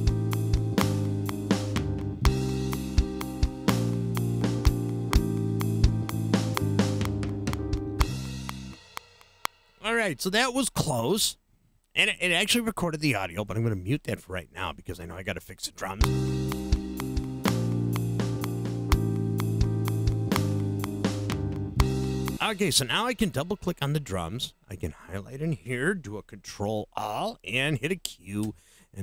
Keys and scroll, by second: 9.5 space, 15.7 space, 22.3 space, 26.9 super+a, 28.4 q.